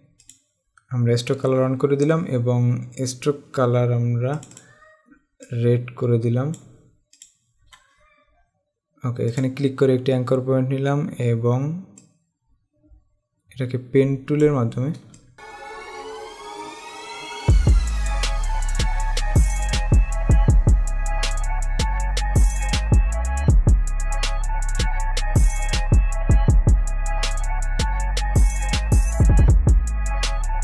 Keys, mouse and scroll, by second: 0.5 click, 4.6 click, 9.5 click, 12.2 click, 15.2 space, 15.2 click, 15.4 space, 16.1 click, 16.7 click, 16.9 click, 17.1 click, 17.4 click, 17.9 click, 18.1 click, 18.8 click, 19.3 click, 19.4 space, 19.5 click, 20.0 click, 20.7 Escape, 20.8 click, 21.5 click, 22.8 click, 23.9 Escape, 24.1 z, 24.3 click, 24.8 click, 25.0 click, 25.7 click, 25.9 click, 26.2 click, 26.5 click, 26.7 click, 27.3 click, 27.5 click, 28.7 click.